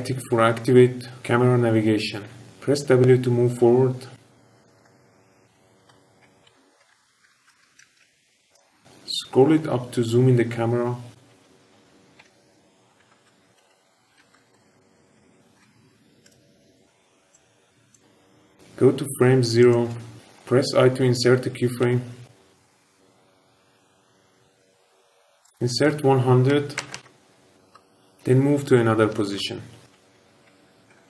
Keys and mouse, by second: 2.3 shift+`, 2.4 shift+w, 4.9-5.9 shift+KP_Add, 5.9-8.4 typing, 6.1 KP_Subtract, 6.3 KP_Subtract, 6.3 KP_Subtract, 6.4 KP_Subtract, 6.5-6.8 KP_Subtract, 12.1-16.1 typing, 17.3 click, 19.5 click, 21.9 i, 25.4-27.7 drag, 26.9 KP_0, 29.0-31.0 typing.